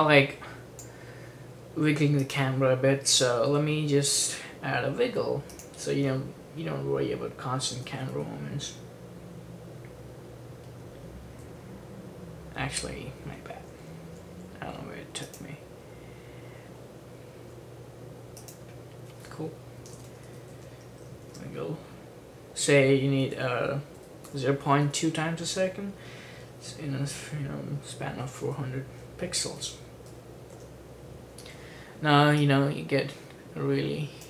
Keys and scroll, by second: 3.6 p, 7.4-8.7 typing, 11.4 typing, 13.7-14.7 typing, 19.7-21.4 typing, 22.7-25.4 typing, 27.9-30.7 typing, 30.8 Return.